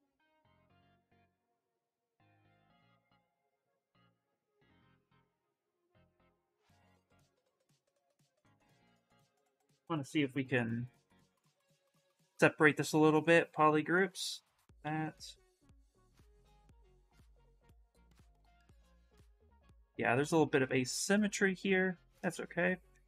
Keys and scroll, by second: 2.7 ctrl+z, 4.3 ctrl+z, 10.2 2, 17.1 ctrl+z, 17.3 ctrl+z, 17.5 ctrl+z.